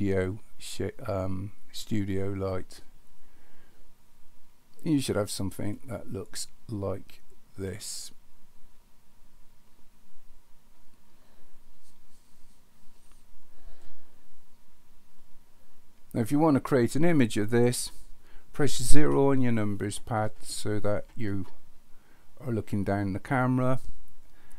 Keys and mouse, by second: 5.8-13.0 middle drag, 13.8-15.2 middle drag, 19.0 KP_0.